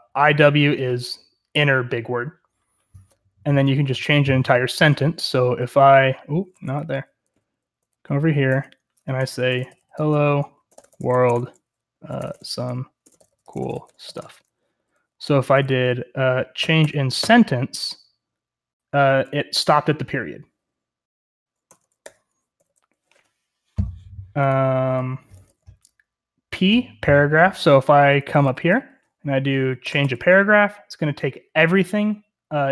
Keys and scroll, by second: 5.0-17.6 typing, 6.4 Escape, 8.4 Return, 21.7 Escape, 22.0-22.6 typing, 25.2-25.5 typing, 27.8-30.0 typing.